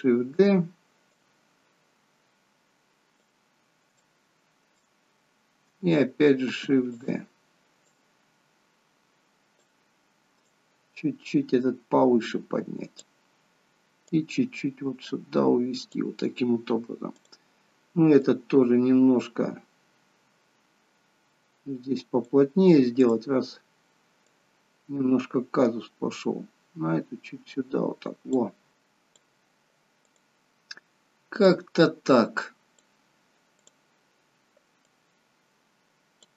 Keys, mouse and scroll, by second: 1.1 click, 3.5 scroll down 2, 4.1 shift+middle click, 6.6 shift+d, 7.9 click, 10.4 click, 14.1 click, 18.2 click, 23.1 click, 24.4 click, 28.7 click, 30.1 click, 31.5 click, 33.7 click, 35.0 click.